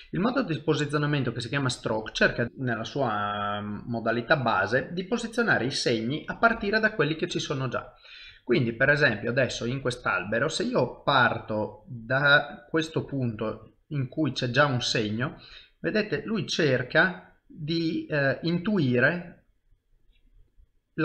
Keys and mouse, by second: 6.4 click, 7.5 shift+middle click, 8.4 ctrl+middle click, 8.8 shift+middle click, 9.2 middle click, 11.4 click, 13.1 middle click, 16.3 click, 17.2 middle click, 18.9 middle click, 20.0 click, 20.7 middle click.